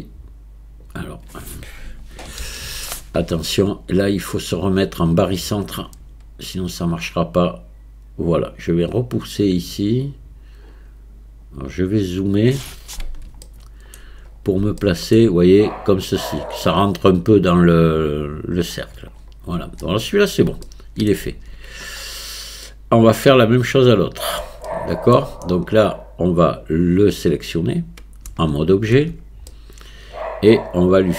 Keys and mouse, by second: 2.4 ctrl+z, 4.5-5.6 drag, 6.9-8.8 drag, 10.1-12.4 drag, 13.4 shift+middle click, 14.8 shift+middle click, 20.7 shift+middle click, 21.3 Tab, 22.6-24.4 middle drag, 24.7-25.2 shift+middle drag, 27.6 click, 28.3 Tab, 29.0 Tab, 29.5-31.1 middle drag.